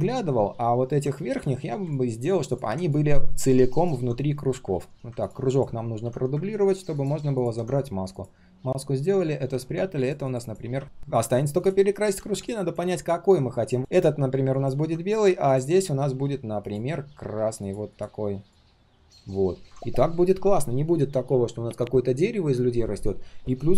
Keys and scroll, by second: 5.9 ctrl+d.